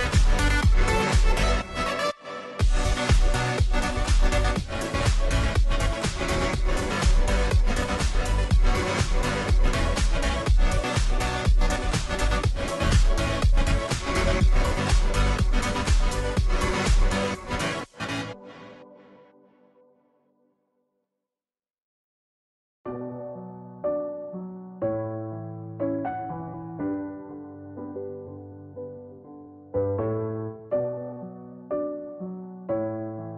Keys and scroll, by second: 5.8-7.7 typing, 32.2 ctrl+j.